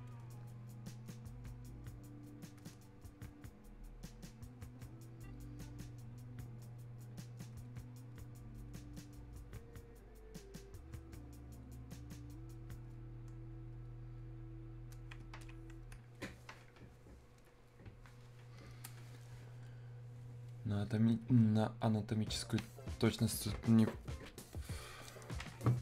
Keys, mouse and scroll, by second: 0.1-16.2 drag, 19.7-22.9 drag, 22.9-25.8 alt+drag.